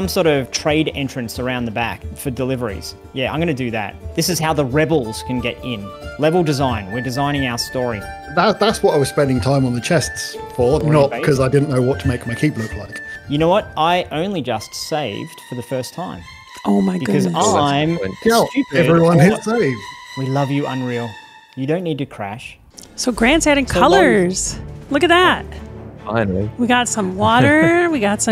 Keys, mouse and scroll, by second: 22.7-27.2 drag.